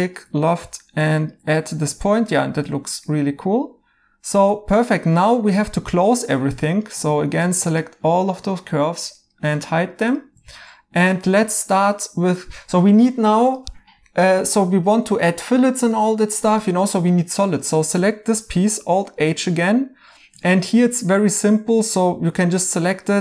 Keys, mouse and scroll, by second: 1.6 right click, 1.6 i, 6.8 2, 9.5 right click, 10.3 Tab, 14.1 right click, 19.0 right click, 20.4 right click.